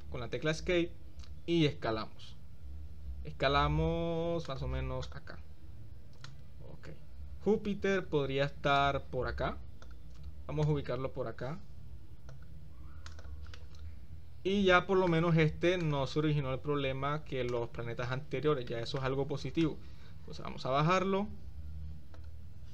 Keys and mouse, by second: 1.6 s, 2.0 click, 5.1-5.5 drag, 6.3-8.2 drag, 8.8-10.0 drag, 10.8-12.5 drag, 13.2 click, 13.6-16.0 middle drag, 16.0 click, 17.5 click, 18.8 shift+middle click, 19.8-22.4 drag.